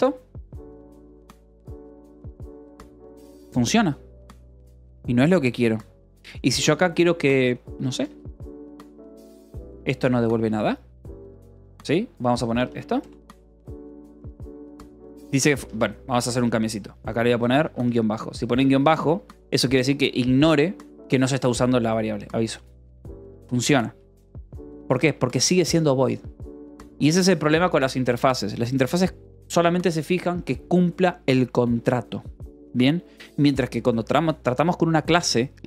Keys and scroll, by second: 0.0-2.6 typing, 3.1 ctrl+s, 5.9-8.3 typing, 9.4 h, 9.8 c, 10.3 Escape, 11.5 ctrl+s, 11.6 a, 12.6 Escape, 13.4 ctrl+s, 13.6-17.9 typing, 18.5 Escape, 19.2 v, 19.8 e, 21.3 Escape, 22.5 l, 23.6-25.2 typing.